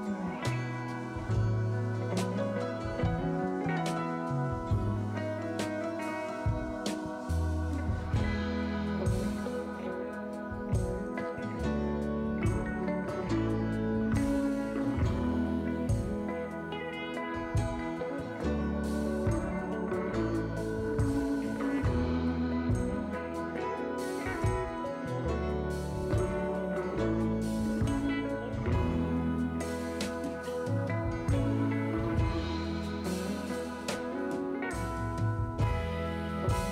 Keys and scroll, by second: 1.5 s, 3.5 s, 4.9 s, 8.1 2, 28.5 s, 30.3 s, 33.5 s, 34.8-35.6 typing.